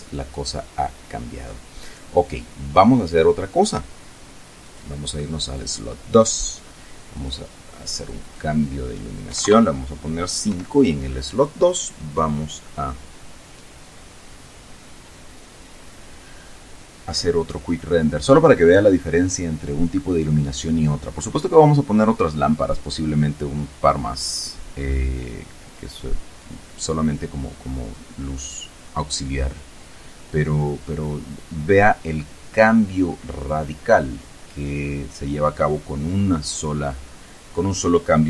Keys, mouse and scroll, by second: 4.6 click, 5.4 click, 7.1 click, 7.9 click, 9.2 KP_5, 9.4 KP_Enter, 10.4 F12.